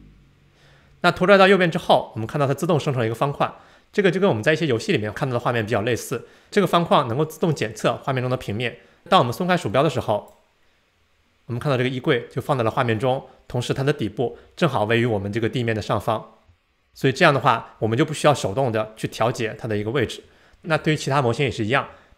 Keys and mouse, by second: 15.8-16.1 drag, 16.1 middle click, 16.2 click.